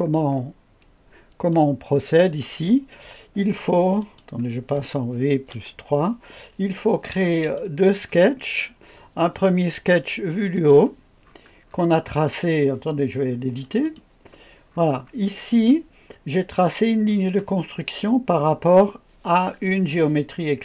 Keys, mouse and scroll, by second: 1.5-2.3 drag, 4.0 click, 5.3 v, 5.5 KP_3, 7.5 click, 8.5-10.5 scroll down 1, 10.5 click, 11.2-12.6 scroll up 1, 12.1 middle click, 13.6 click, 14.7-15.3 scroll up 1, 15.3 right click, 17.0 click.